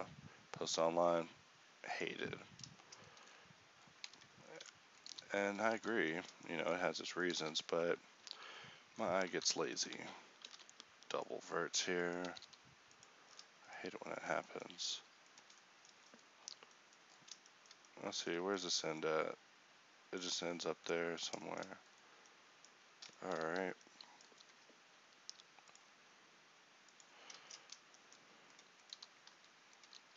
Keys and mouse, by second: 4.1 ctrl+Tab, 5.1 g, 9.3 z, 10.5 alt+m, 11.7 z, 12.3 g, 16.0-18.0 middle drag, 18.1 middle click, 20.9 middle click.